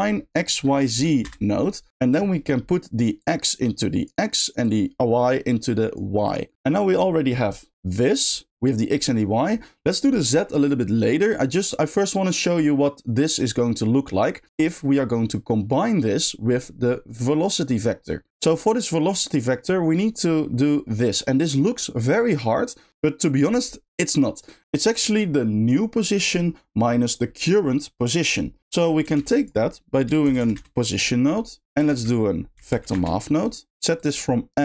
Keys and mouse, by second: 2.1 click, 2.4 middle click, 3.2-4.0 drag, 4.7-5.9 drag, 6.2 click, 13.6 middle click, 14.8 middle click, 18.9 middle click, 20.4 middle click, 33.9 shift+drag.